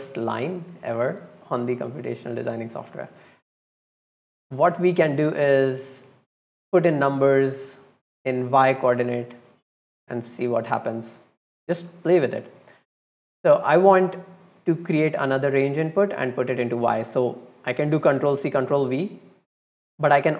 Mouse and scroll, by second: 1.0 click, 1.8 click, 2.6-3.5 drag, 4.5 click, 5.3-6.1 drag, 6.4 middle click, 9.8-10.1 drag, 10.7-11.0 drag, 11.6 click, 13.6-16.0 drag, 16.9 drag, 18.8-19.5 drag, 20.0 click.